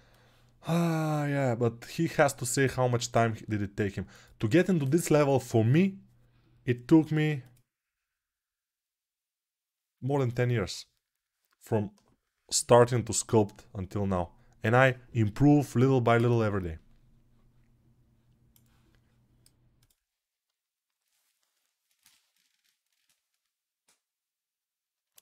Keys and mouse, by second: 0.0 click, 0.9 click, 1.3 right click, 1.7 right click, 1.9-25.2 drag.